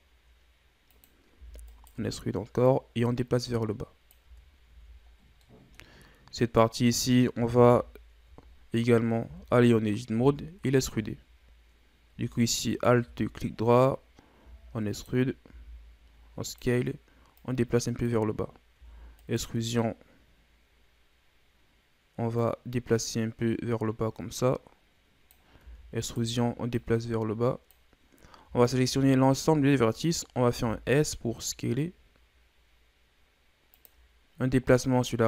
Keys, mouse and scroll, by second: 2.6-4.2 drag, 4.2 Tab, 4.7 a, 5.1 scroll down 2, 5.4 middle click, 5.9-6.4 scroll up 1, 6.4 right click, 7.7 KP_1, 8.5-9.2 shift+scroll up 2, 9.2 Tab, 12.7 alt+right click, 14.4 e, 17.3-18.8 drag, 18.8 e, 22.4-25.4 drag, 25.6 e, 26.8-28.2 drag, 28.2 scroll down 1, 28.4 a, 28.8 a, 30.5 s, 34.8-35.2 drag.